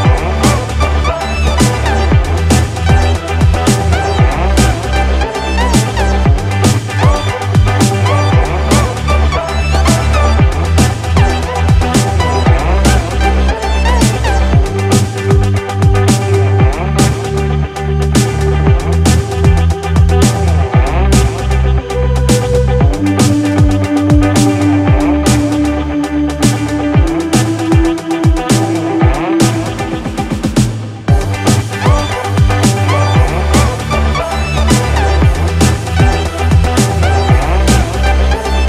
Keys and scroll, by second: 2.6 ctrl+z, 5.1 ctrl+z, 7.4 ctrl+=, 8.7 ctrl+z, 12.0 ctrl+-, 15.0 ctrl+-, 18.2 ctrl+=, 22.2 ctrl+=, 22.5 ctrl+-, 29.7 ctrl+=, 31.2 ctrl+0.